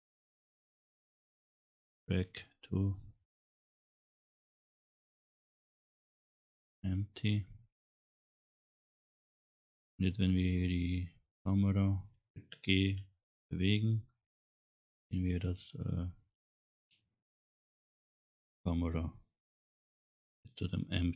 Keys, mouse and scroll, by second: 2.3 click, 5.5 click, 11.1 scroll down 1, 12.9 g, 19.5 click, 20.1 scroll up 1.